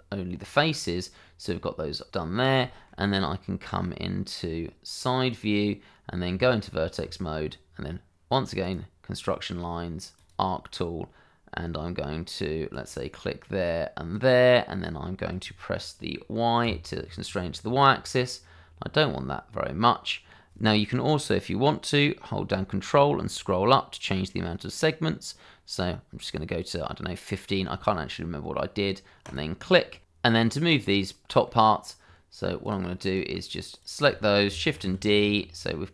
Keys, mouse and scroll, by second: 0.4 middle click, 2.1 click, 2.7 shift+middle click, 3.1 scroll up 1, 3.8 middle click, 5.3 click, 6.3 Tab, 8.6 click, 12.7 click, 16.6 y, 23.0-23.3 ctrl+scroll up 1, 24.6-25.5 ctrl+scroll down 1, 25.5-26.2 ctrl+scroll up 1, 26.2-26.8 ctrl+scroll down 1, 26.8-27.5 ctrl+scroll up 1, 29.2 click, 30.0-30.3 scroll down 1, 30.3 click, 30.7 middle click, 32.6 click, 34.1 shift+middle click, 34.6 shift+d.